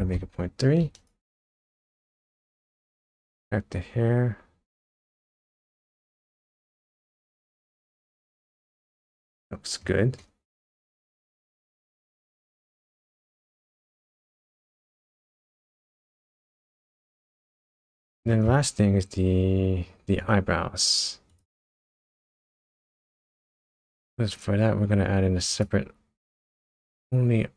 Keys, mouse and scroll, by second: 0.9 click, 1.4 scroll down 3, 2.0 middle click, 3.1 shift+middle click, 6.7 scroll up 1, 7.1-7.5 scroll down 3, 7.7 middle click, 9.3 shift+middle click, 10.2 middle click, 10.8 middle click, 11.9 middle click, 12.4-13.0 scroll up 5, 13.2 middle click, 13.9 middle click, 14.7 shift+middle click, 15.6 middle click, 16.5-17.5 scroll up 5, 17.8 middle click, 18.5 scroll up 1, 20.2 click, 21.3 click, 21.8 click, 22.6 shift+a.